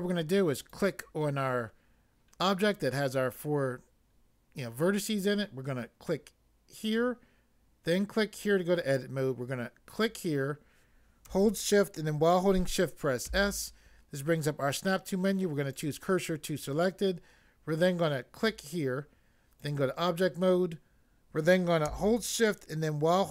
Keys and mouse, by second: 0.6 click, 6.8 click, 8.4 click, 10.0 click, 13.3 s, 15.7 click, 18.3 click, 19.6 click.